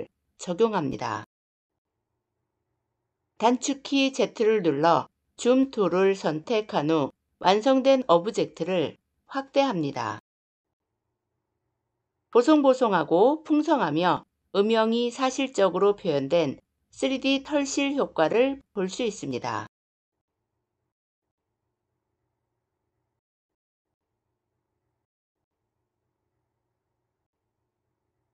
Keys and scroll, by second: 3.7 z.